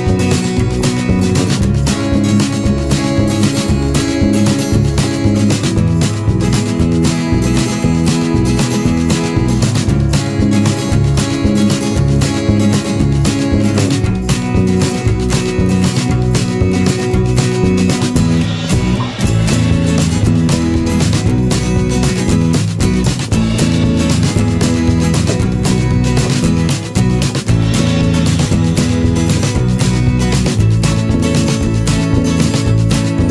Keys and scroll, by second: 2.0 ctrl+-, 3.2 ctrl+z, 7.0 ctrl+=, 7.1 ctrl+space, 19.3 ctrl+-, 20.3 ctrl+z, 23.3 ctrl+=, 23.5 ctrl+space.